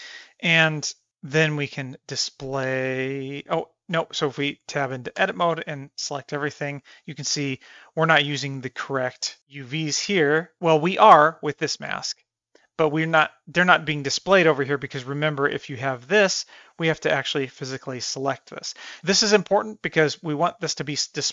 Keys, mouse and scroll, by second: 1.8-3.4 drag, 4.4 Tab, 5.2 a, 11.3-12.6 drag, 15.5 click.